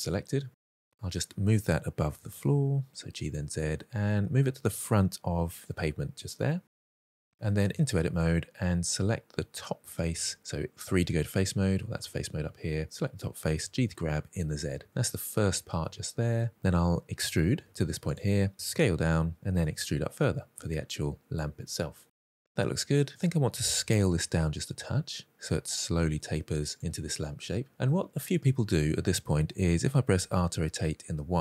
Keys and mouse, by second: 0.6 click, 0.8-1.1 middle drag, 1.8 g, 2.2 z, 3.0 click, 3.2 middle drag, 4.0 g, 4.2 y, 4.6 x, 5.3 click, 5.8 middle click, 6.7-7.5 middle drag, 7.6 Tab, 9.8 3, 12.7 click, 13.4 g, 13.7 z, 14.8 click, 15.5 shift+middle click, 15.8 middle click, 17.5 e, 17.9 click, 18.3 s, 19.3 click, 19.6 e, 20.9 click, 21.2 middle click, 22.2 shift+middle click, 22.9 middle click, 23.9 s, 26.3 click, 27.2 middle click, 29.9 r, 30.7 y.